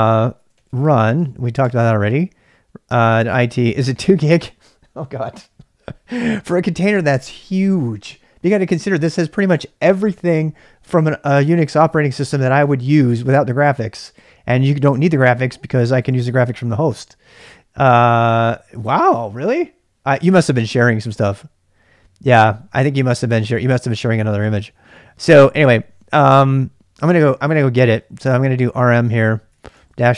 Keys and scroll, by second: 0.3-2.9 typing, 27.9-30.1 typing.